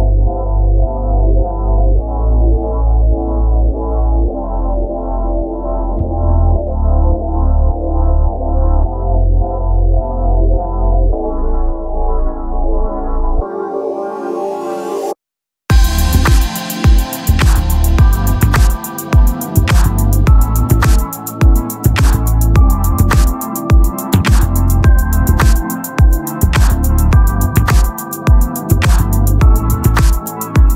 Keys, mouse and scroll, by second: 1.0-3.6 right drag, 1.5 x, 2.8 shift+d, 4.2 KP_3, 4.6 z, 5.1 z, 6.3 click, 8.1 click, 9.3 s, 16.4 n, 18.9 n, 19.8 t, 20.3 click, 20.8-26.2 drag, 20.8 shift+a, 21.5 KP_1, 26.2 s, 27.5-28.8 drag, 28.8-30.4 middle drag, 29.5 s.